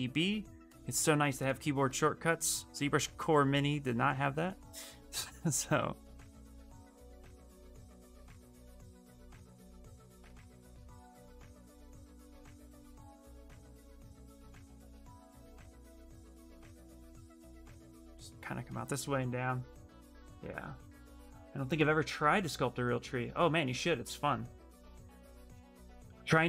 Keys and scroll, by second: 0.3 s, 14.2 ctrl+z, 17.0 ctrl+z.